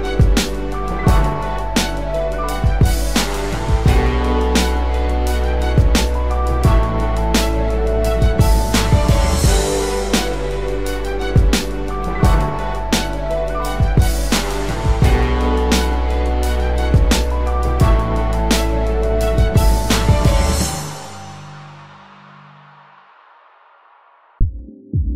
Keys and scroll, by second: 6.2 ], 9.6 [.